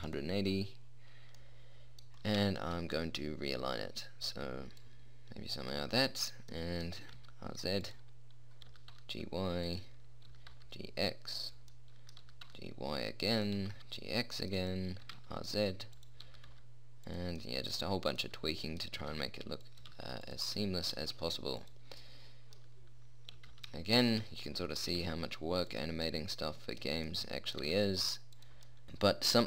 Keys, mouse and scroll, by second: 1.7-3.1 middle drag, 5.1 click, 7.3 r, 9.0 g, 10.6 g, 12.1 middle click, 12.5 g, 12.8-13.9 middle drag, 13.9 g, 15.4 r, 16.6 g, 19.3 g, 20.1 g, 21.3 g, 23.7 g, 25.3 r, 27.9 g.